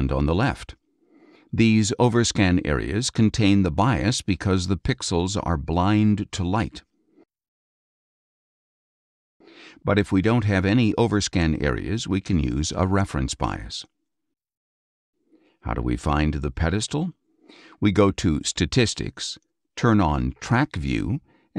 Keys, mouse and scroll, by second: 0.0 ctrl+shift+space, 0.5-1.6 ctrl+shift+drag, 7.1-8.4 scroll up 10, 12.0 click, 15.6-16.8 drag, 19.6 click.